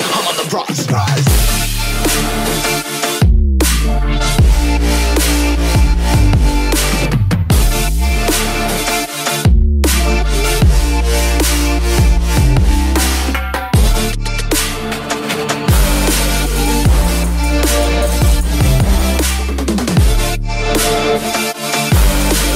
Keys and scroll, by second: 14.1 ctrl+j.